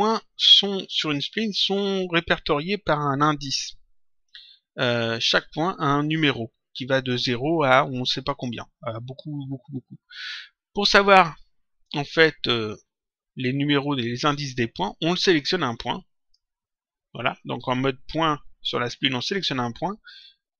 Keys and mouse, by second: 0.0 click, 15.3 click.